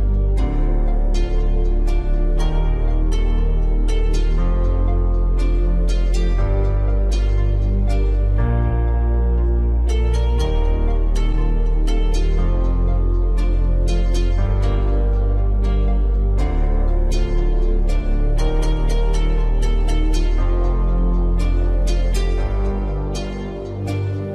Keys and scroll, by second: 16.6 ctrl+alt+z, 22.4 ctrl+t.